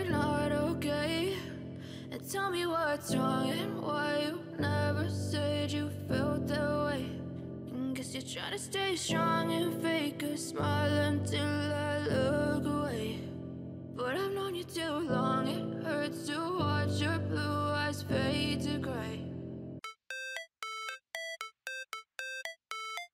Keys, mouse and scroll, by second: 0.4 scroll up 2, 7.8 ctrl+-, 8.1 ctrl+-, 8.6 ctrl+=, 9.8 ctrl+=, 16.6 double click.